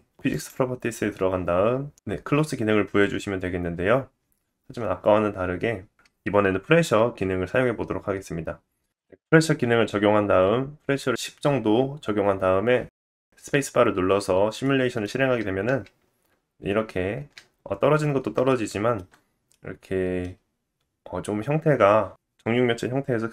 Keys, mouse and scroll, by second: 0.2 middle click, 0.2 scroll down 1, 0.3 click, 1.9-9.6 drag, 3.7-5.8 scroll down 10, 9.6-10.9 middle drag, 10.9-13.3 drag, 13.3-23.3 middle drag, 15.6 space, 17.1 space, 17.5-18.1 scroll down 3.